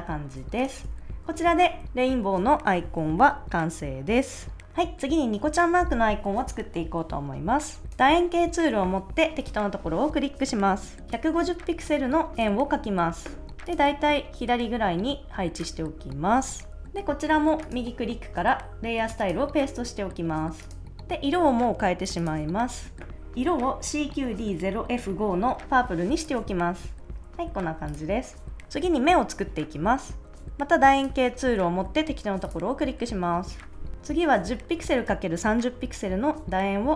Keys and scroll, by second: 0.8 super+s, 11.0 o.